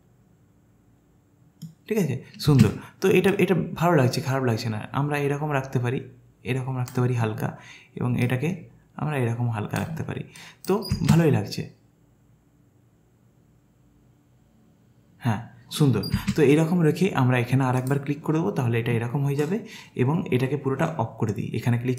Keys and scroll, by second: 2.5 space, 10.9 space, 16.2 space.